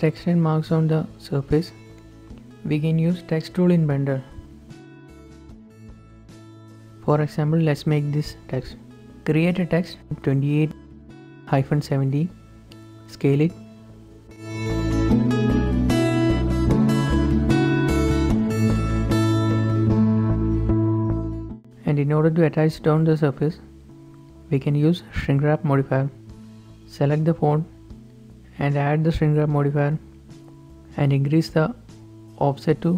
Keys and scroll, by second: 0.7 z, 3.1 a, 8.5 Tab, 9.1-11.2 typing, 12.3 Tab, 14.4 shift+g, 15.4 g, 16.1 shift+g, 16.2 z, 17.2 typing, 17.5 shift+Tab, 18.8-19.5 typing, 19.5 ctrl+s, 32.6 shift+Right, 32.7 Left.